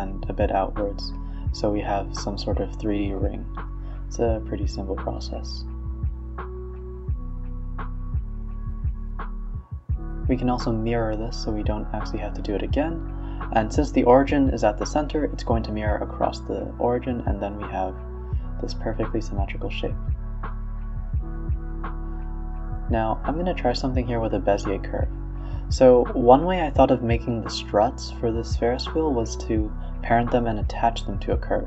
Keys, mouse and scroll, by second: 0.0 click, 0.3 click, 0.5 click, 0.8 ctrl+z, 1.0 ctrl+z, 1.4 middle click, 2.3-4.1 drag, 4.5 click, 4.8 middle click, 5.2 e, 5.4 s, 6.4 middle click, 6.8 scroll up 1, 7.0 s, 8.2-9.9 drag, 10.2 click, 10.6 click, 10.9-12.5 drag, 12.8 click, 13.1-13.9 middle drag, 13.9 Tab, 14.4 middle click, 15.2 click, 15.6 click, 15.9 middle click, 16.4 Tab, 16.7 a, 17.2 e, 18.7 Tab, 18.9-20.3 middle drag, 20.3-20.7 scroll down 3, 20.7-21.7 middle drag, 21.7 click, 22.3 shift+d, 23.0 x, 23.4 shift+a, 25.4-25.9 middle drag, 25.9 KP_1, 26.1 KP_3, 26.4 r, 27.7 s, 29.4-30.9 middle drag, 30.9 click, 31.2 click.